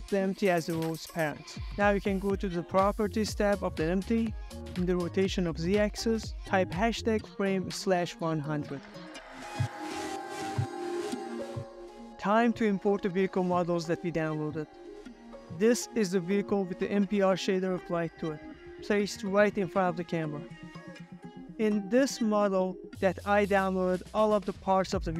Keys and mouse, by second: 9.0 space, 10.3 space, 10.3 KP_0, 11.4 space, 15.1 space, 16.3 z, 18.7 ctrl+middle click, 19.9 ctrl+middle click, 21.3-21.7 ctrl+middle drag, 21.8-22.6 middle drag, 22.7-23.1 ctrl+middle drag, 23.5 middle click, 24.0 ctrl+middle click, 24.4-24.9 shift+middle drag.